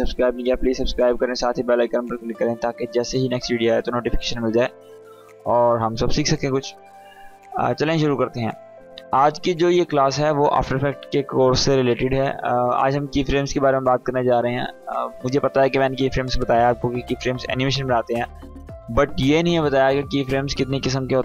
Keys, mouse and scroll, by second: 8.9 click, 12.9-14.5 drag.